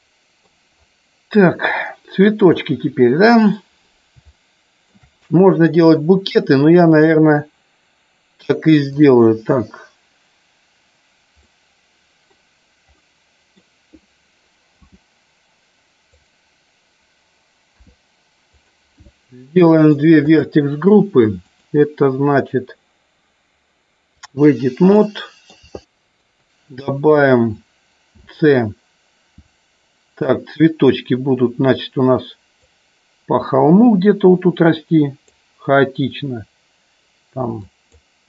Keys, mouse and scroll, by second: 2.4 click, 4.3-4.9 shift+middle drag, 8.8 click, 11.5-12.3 middle drag, 12.9-13.7 middle drag, 16.1 click, 18.5 click, 19.0 scroll up 1, 19.1 middle click, 20.3 click, 21.4-24.3 drag, 25.0 middle click, 25.8 shift+middle click, 37.6 click.